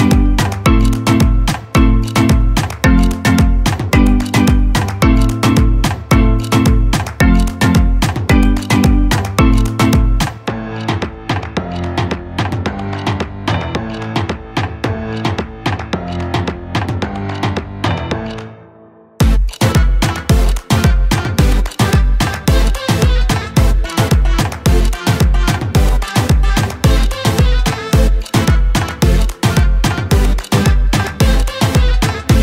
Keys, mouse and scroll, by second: 4.0-6.7 drag, 7.1-14.9 drag, 14.9-17.1 typing, 20.5 click, 22.6-26.8 shift+drag, 28.9 Down, 30.1 Down, 30.3 click, 31.5-32.0 scroll up 1, 32.0-32.4 scroll down 1.